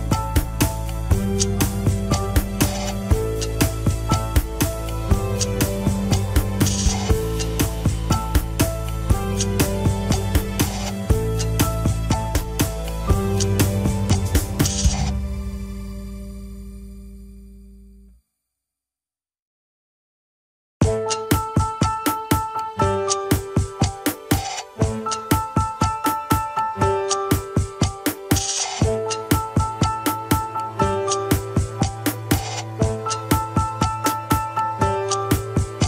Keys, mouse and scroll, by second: 1.1 KP_1, 1.7 ctrl+Tab, 3.2 ctrl+Tab, 4.4 ctrl+click, 5.5 ctrl+Tab, 6.3 drag, 7.3 ctrl+Tab, 7.6 alt+z, 8.3-8.9 drag, 9.0-9.4 scroll up 2, 9.4 g, 12.4 KP_3, 12.6 scroll up 1, 13.1 g, 16.7 scroll down 4, 16.8 KP_1, 18.2 g, 22.5-22.9 drag, 23.6 click, 27.1-28.5 middle drag, 28.5-29.5 scroll down 2, 28.7 KP_1, 29.5 ctrl+s, 29.8 a, 30.1 alt+r, 30.3 alt+g, 32.2 drag, 33.0 alt+z, 33.5 alt+z, 33.9 click.